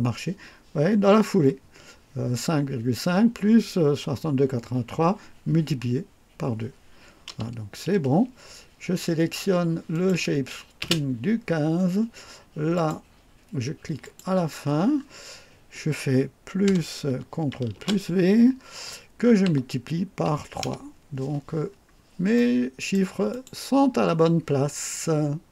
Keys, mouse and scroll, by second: 9.9 click, 10.8 space, 12.8 click, 14.0 click, 16.7 KP_Add, 17.8 ctrl+v, 19.5 KP_Multiply, 20.7 KP_Enter, 21.5-21.9 scroll down 2, 22.4 right click, 23.3 click.